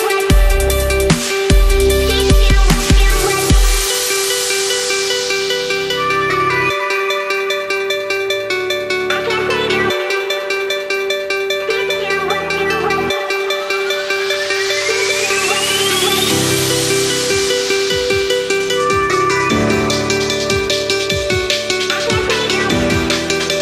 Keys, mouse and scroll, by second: 6.4 click, 7.5 right click, 8.6 click, 11.0 ctrl+v, 11.8 click, 13.7 space, 13.8 click, 14.0 space, 14.9 click, 16.0-17.2 typing, 17.3 ctrl+s, 18.4 click, 20.0-21.5 typing, 22.1 click, 22.4 Left.